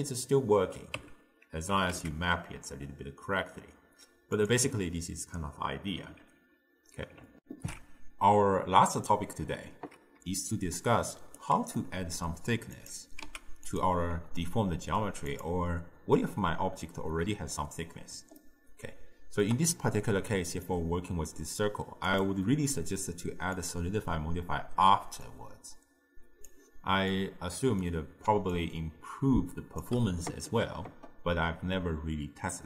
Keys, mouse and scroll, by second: 1.0 Tab, 1.8 g, 4.8 Tab, 7.4 ctrl+alt+shift+w, 10.2 d, 10.6 right click, 11.4 d, 11.6 d, 11.8-12.8 middle drag, 12.8 click, 13.3 x, 14.4-15.3 ctrl+middle drag, 15.3 click, 18.4-22.1 shift+middle drag, 23.7-25.2 drag, 25.3-27.2 drag, 27.2-28.4 middle drag, 28.4 d, 28.6-29.9 drag, 29.9 d, 30.0 d.